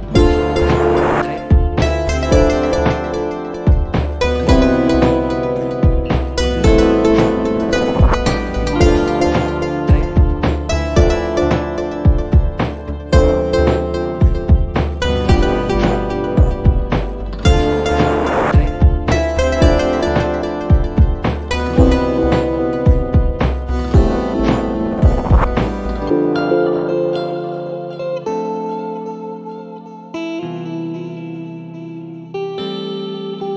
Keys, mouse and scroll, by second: 1.2-4.4 typing, 5.2 Return, 8.1-8.7 scroll up 2, 8.9-9.4 scroll down 2, 9.6-10.0 scroll up 2, 10.1-11.4 scroll up 6, 11.5-12.3 scroll down 4, 13.8 click, 14.5 right click, 15.2 click, 16.6 click, 17.6 click, 18.2-19.4 typing, 20.8-23.4 typing, 21.5 Caps_Lock, 21.9 Caps_Lock, 24.4 Caps_Lock, 25.0 BackSpace, 26.1-28.0 typing, 29.2 click, 29.9 click, 31.1 click, 32.5 click, 33.0 click.